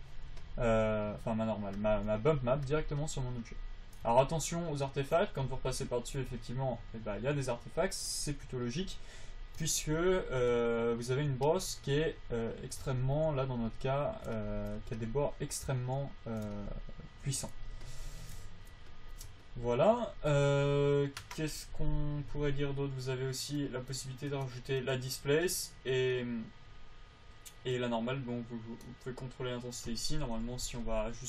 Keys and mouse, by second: 9.0 click, 9.5-10.5 middle drag, 12.2-15.4 middle drag, 15.4 click, 19.8-26.1 drag, 26.1-31.2 right drag.